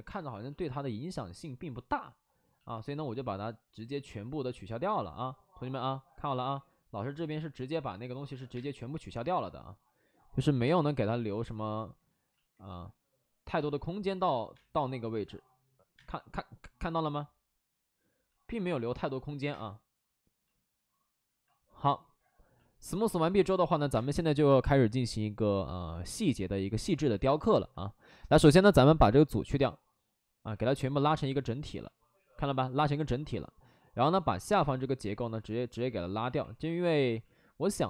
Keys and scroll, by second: 0.0 space, 8.5 space, 8.9 3, 10.2 ctrl+z, 10.6 3, 10.7 3, 12.2 ctrl+z, 13.5 ctrl+z, 14.4 space, 15.9 space, 16.6 space, 18.2 ctrl+z, 19.4 space, 23.9 space, 25.0 shift+f, 25.4 shift+f, 36.1 ctrl+z.